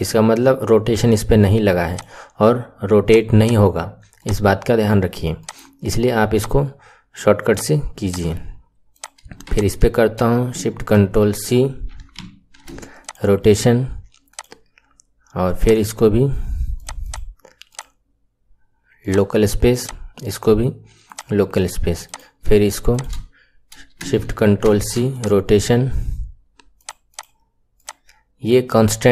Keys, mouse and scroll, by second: 1.8 click, 3.1 click, 4.1-8.0 drag, 8.9 click, 9.4 shift+click, 10.9-11.8 ctrl+shift+x, 12.1 ctrl+shift+c, 14.2 click, 15.5 click, 16.8 click, 17.0 click, 17.6-22.1 drag, 22.8 shift+click, 24.6 ctrl+shift+c, 26.8 click, 27.2 click, 27.7-29.1 drag.